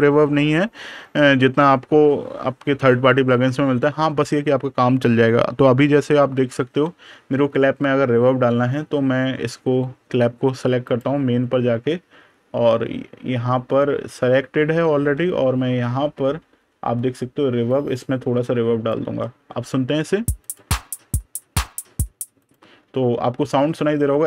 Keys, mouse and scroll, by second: 6.4 super+KP_Subtract, 8.3 super+KP_Add, 9.0 super+KP_Subtract, 10.7 click, 11.5 super+KP_Add, 12.3 super+KP_Subtract, 13.2 super+KP_Add, 14.8 super+KP_Subtract, 16.4 super+KP_Add, 17.5 click, 19.1 super+KP_Subtract, 20.3 click.